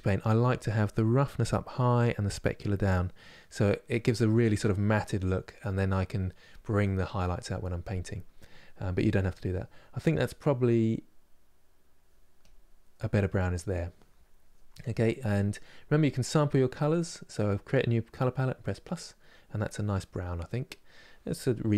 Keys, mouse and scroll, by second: 0.8-3.1 drag, 3.1-10.3 middle drag, 10.3-12.2 drag, 12.7-21.7 middle drag.